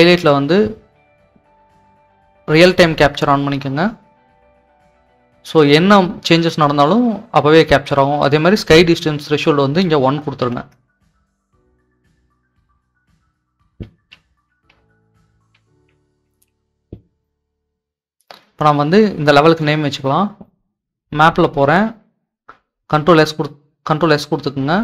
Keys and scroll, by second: 10.4 1, 10.7 Return, 12.8-16.1 typing, 22.0 ctrl+s.